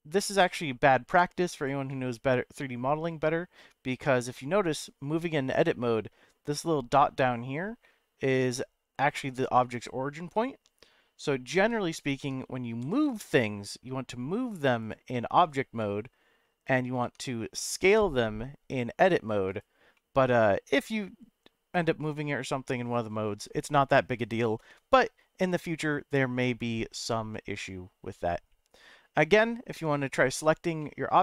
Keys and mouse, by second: 0.1 g, 0.3 z, 1.5 click, 1.9-3.1 middle drag, 4.3-5.6 middle drag, 11.6 ctrl+z, 12.2 Tab, 12.8 g, 13.0 z, 14.8 click, 15.1-16.4 middle drag, 17.0 Tab, 17.7 s, 19.5 right click, 19.9-21.0 middle drag, 29.2 middle click, 29.8 Tab, 30.3 Tab, 30.8 middle click.